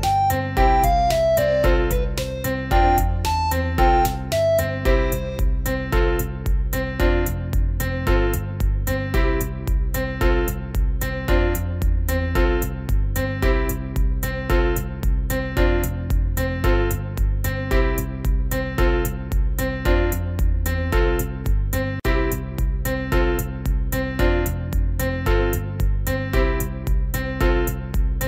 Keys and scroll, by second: 26.9 ctrl+z.